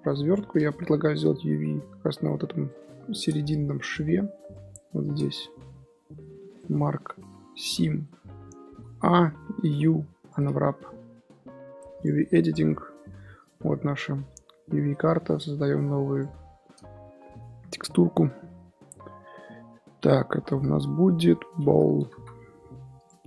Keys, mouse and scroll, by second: 0.1 middle click, 0.3 Tab, 0.5 click, 0.8 g, 3.5 middle click, 3.8 click, 4.4 Tab, 4.7-5.2 scroll up 2, 5.2 2, 5.5 alt+click, 5.9 scroll down 1, 6.2 middle click, 6.5 right click, 7.8 scroll down 3, 8.0 middle click, 8.7 a, 9.7 u, 11.9 click, 22.9 l.